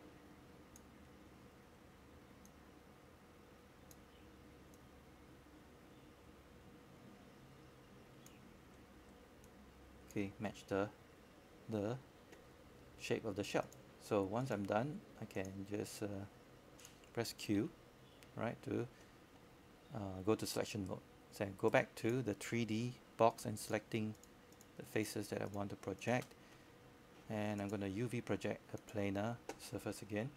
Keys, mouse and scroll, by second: 0.7 alt+middle click, 1.3 scroll up 1, 1.8 alt+middle click, 2.5 scroll up 1, 2.9 alt+middle click, 4.5-30.3 drag.